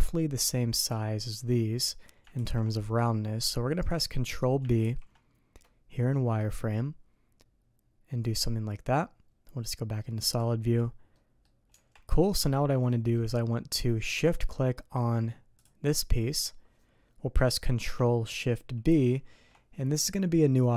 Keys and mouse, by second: 2.4 ctrl+b, 10.2 click, 11.1 click, 11.7 Tab, 12.4 click, 15.6 shift+click.